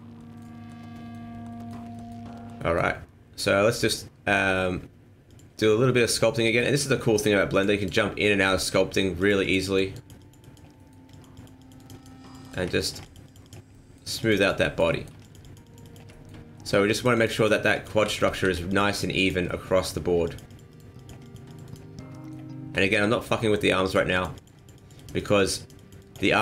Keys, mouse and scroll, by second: 0.5-0.9 scroll down 2, 0.7 middle click, 1.5 middle click, 1.7 scroll down 1, 1.9 shift+middle click, 2.0 shift+middle click, 2.3 scroll up 3, 2.5 middle click, 5.3 click, 6.4 middle click, 6.8 scroll up 1, 6.9 shift+middle click, 7.5 click, 7.8 click, 8.3 ctrl+z, 9.2 click, 9.4 click, 9.6 click, 9.9 click, 10.2 click, 10.4 click, 10.7 middle click, 11.1 click, 11.3 click, 11.6 click, 11.7 click, 12.0 click, 12.2 click, 12.4 click, 12.7 shift+middle click, 13.0 click, 13.3 click, 13.4 click, 13.7 middle click, 14.2 click, 14.4 click, 14.6 middle click, 14.9 shift+middle click, 15.2 click, 15.4 click, 15.6 click, 15.8 click, 16.1 shift+middle click, 16.5 middle click, 16.9 click, 17.1 click, 17.3 click, 17.7 click, 18.0 ctrl+z, 18.3 ctrl+z, 18.4 ctrl+z, 18.7 click, 18.9 click, 19.1 click, 19.5 middle click, 20.2 click, 20.5 click, 20.7 click, 20.9 click, 21.2 click, 21.5 click, 21.6 click, 21.9 scroll down 2, 22.1 middle click, 22.5-22.9 scroll up 2, 22.7 shift+middle click, 23.5-23.9 scroll up 2, 23.9 click, 24.1 click, 24.3 click, 24.5 click, 24.7 click, 24.9 click, 25.1 click, 25.3 click, 25.5 click, 25.7 click, 26.0 click, 26.3 middle click.